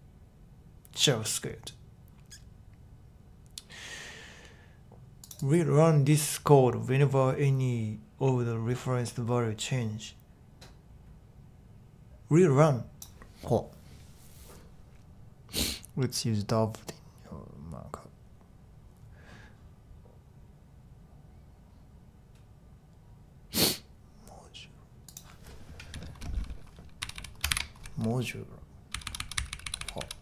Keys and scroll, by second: 26.7-30.2 typing.